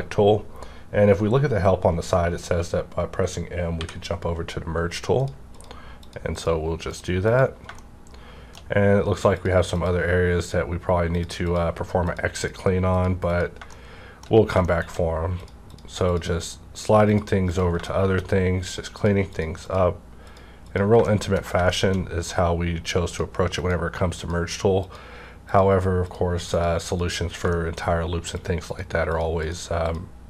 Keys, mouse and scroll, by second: 3.8 shift+click, 3.8 m, 5.5 click, 7.8 shift+middle click, 8.1 shift+scroll down 1, 9.3 click, 9.4-9.7 shift+scroll down 1, 13.7 middle click, 14.3 shift+scroll down 1, 15.4 click, 17.9 shift+middle click, 18.7 click, 21.0 middle click, 21.1 shift+middle click, 21.7 shift+middle click, 21.8 shift+scroll down 1, 23.1 click, 23.6 click, 24.5 click, 27.5 middle click, 28.3 click.